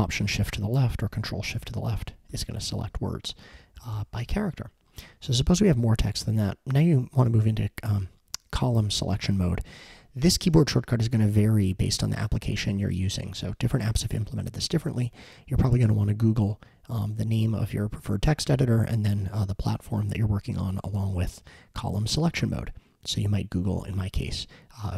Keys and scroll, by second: 0.4 alt+shift+Left, 1.0 alt+shift+Left, 2.0 alt+shift+Right, 2.3 alt+shift+Right, 3.5 alt+shift+Left, 3.8 alt+shift+Left.